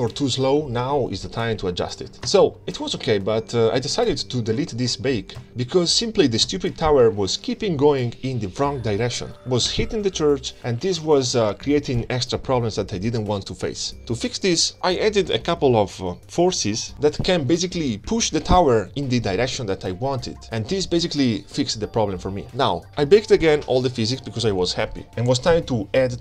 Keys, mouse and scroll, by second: 0.1 middle click, 1.0 scroll up 1, 1.1 scroll down 1, 1.1 scroll up 1, 1.2 middle click, 1.5 scroll down 1, 1.5 middle click, 2.1 scroll down 1, 2.4 space, 3.7 space, 3.9 KP_0, 3.9-4.3 scroll down 10, 4.2 space, 6.5 scroll down 2, 6.8 space, 9.9 space, 10.3 KP_0, 10.5-11.1 scroll down 10, 11.1 space, 11.6-12.1 scroll up 2, 14.4 space, 15.9 click, 16.1-16.8 middle drag, 17.2-17.5 scroll up 2, 17.9 shift+click, 18.2-20.5 middle drag, 20.7 click, 20.9-22.3 middle drag, 22.8 shift+click, 23.2-24.6 middle drag, 24.6-25.6 middle drag, 26.1 middle click.